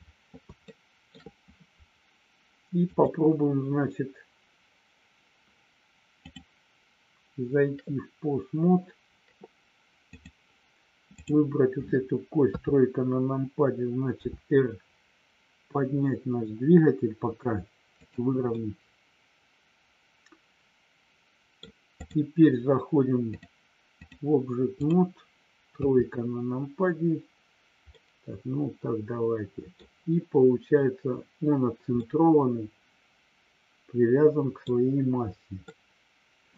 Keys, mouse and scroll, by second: 28.2-36.5 middle drag.